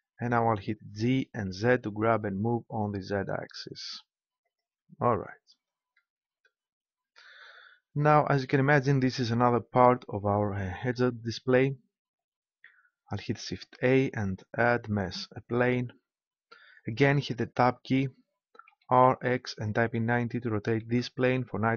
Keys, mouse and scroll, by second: 0.8 g, 4.5-6.2 drag, 7.1 Tab, 13.7 shift+a, 17.5 Tab, 18.7 r.